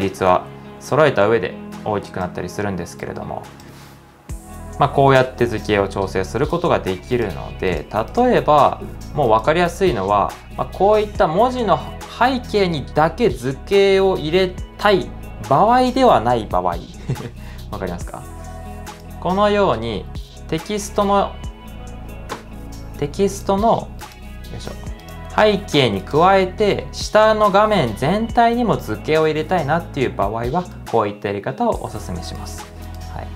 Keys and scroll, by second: 0.4 super+z, 21.5 2.